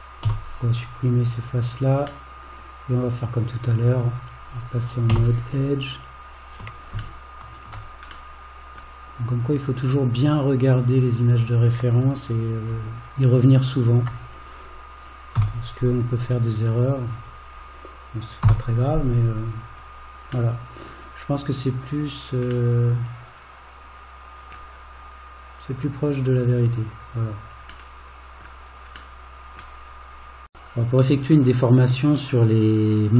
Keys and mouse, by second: 0.3 x, 2.3-3.5 middle drag, 5.1 2, 7.2 shift+middle click, 8.3 middle click, 11.2 click, 13.8 shift+click, 15.4 f, 16.7 click, 20.6 middle click, 22.7-24.5 middle drag, 29.2 middle click.